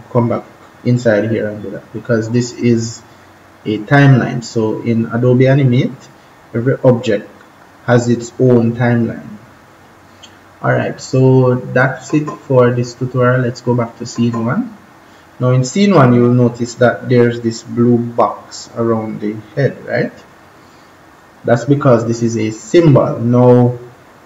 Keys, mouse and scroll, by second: 11.8 click, 15.2-15.6 scroll down 1, 15.6 scroll up 1.